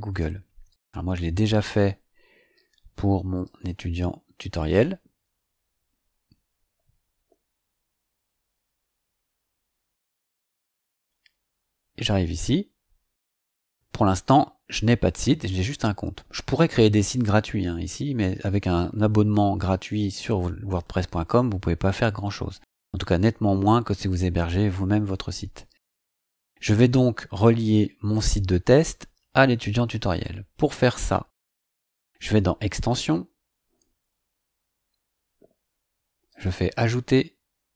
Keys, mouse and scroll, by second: 0.7 click, 2.5 click, 4.7 click, 31.5 click, 32.9 click, 36.3 click.